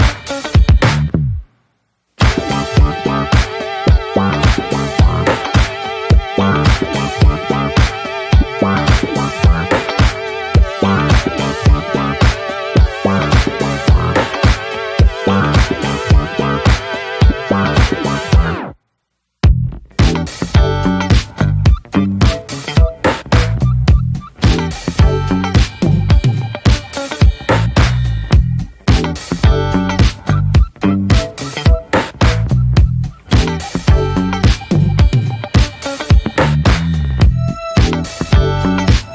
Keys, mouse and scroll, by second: 0.2 shift+middle click, 0.8 middle click, 0.9 scroll up 1, 1.0 ctrl+z, 4.3-4.8 scroll up 2, 4.4 shift+middle click, 4.8-6.5 shift+middle drag, 6.9 scroll down 1, 7.2-7.9 scroll up 3, 7.3 middle click, 7.7 shift+middle click, 7.9 shift+middle click, 8.5-9.3 scroll up 4, 8.6 middle click, 8.9 shift+middle click, 9.3-10.9 middle drag, 10.9 scroll up 2, 11.0-12.6 shift+middle drag, 12.6 click, 13.1 middle click, 13.4 ctrl+z, 14.6 scroll down 1, 14.8-17.9 middle drag, 17.9 click, 18.9 alt+middle click, 19.0 scroll up 1, 19.2-20.4 shift+middle drag, 20.4 click, 21.1-22.4 middle drag, 22.4 ctrl+z, 22.9 shift+middle click, 23.0-24.6 shift+scroll up 1, 24.6 click, 24.9 ctrl+z, 25.4-26.9 right drag, 26.9 click, 27.3 middle click, 28.2 scroll down 1, 28.4-30.7 middle drag, 30.7 click, 31.1-32.7 middle drag, 32.7 click, 33.0-33.5 scroll down 4, 33.2 middle click, 33.5 shift+middle click, 33.8-35.4 scroll up 2, 33.9 shift+middle click, 35.4 click, 35.7 middle click, 35.9 scroll down 1, 36.2 ctrl+z, 36.6 alt+middle click, 36.9-39.1 scroll up 3, 37.2 shift+middle click.